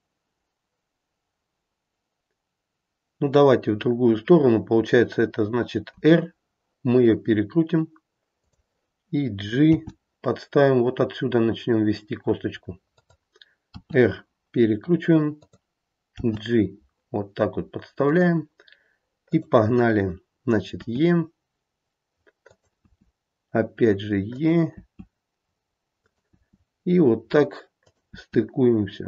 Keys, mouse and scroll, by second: 5.9 r, 9.6 g, 13.7 r, 16.2 g, 19.3 click, 20.8 e, 22.8 e, 26.3 e, 28.1 e.